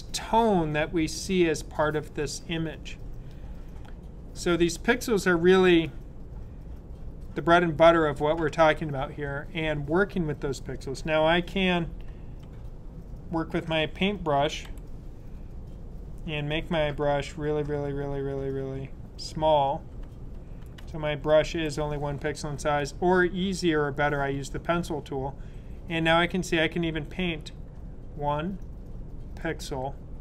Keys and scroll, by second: 12.4-14.6 typing, 16.9-21.4 typing.